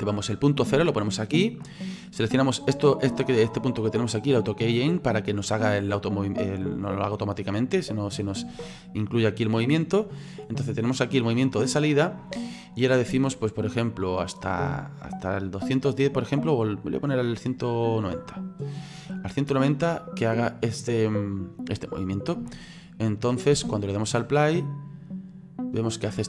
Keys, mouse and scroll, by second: 4.4 click, 7.2 click, 10.4 click, 13.4 click, 15.8 click, 19.1-19.4 scroll down 3, 19.5-20.7 middle drag, 20.7 click, 23.5 space.